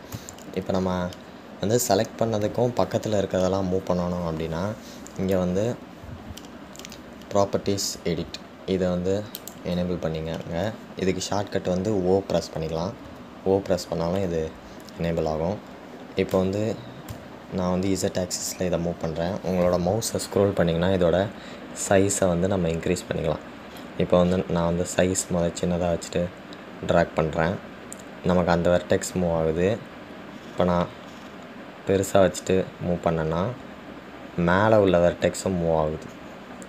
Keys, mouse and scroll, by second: 10.6 click.